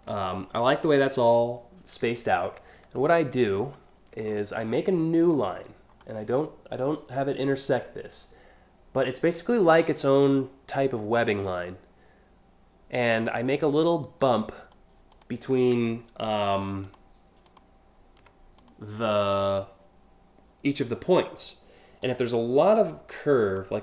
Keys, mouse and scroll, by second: 1.8 ctrl+click, 3.2 alt+scroll up 1, 3.9 scroll down 2, 4.4 alt+scroll up 2, 4.6 alt+scroll down 1, 5.2-5.6 scroll down 2, 7.4-9.9 drag, 12.9-14.4 drag, 13.6 right click, 14.7 click, 16.4 ctrl+click, 17.1 ctrl+click, 18.2 click, 21.7-23.2 ctrl+drag.